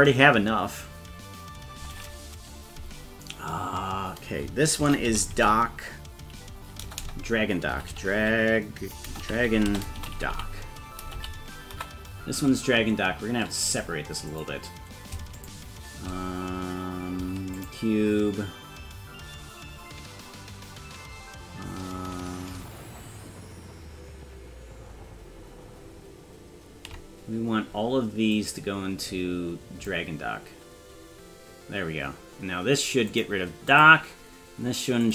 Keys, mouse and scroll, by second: 7.0 BackSpace, 14.4 click, 14.4 scroll up 1, 15.4 shift+click, 17.6 ctrl+click, 28.4-30.1 drag, 33.2 click, 33.9 click.